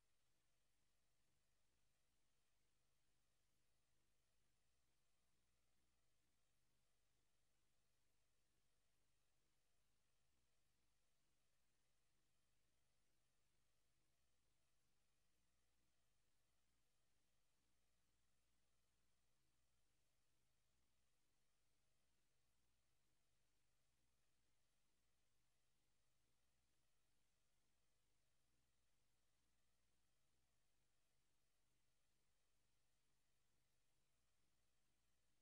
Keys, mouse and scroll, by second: 0.0 click, 1.2 click, 2.4 right click, 10.6 click, 11.5 click, 12.4 r, 14.7 click, 16.0 KP_0, 19.2 s, 21.1 click, 22.2 click, 25.2 s, 26.8 click, 27.9 click, 30.0 r, 34.7 click.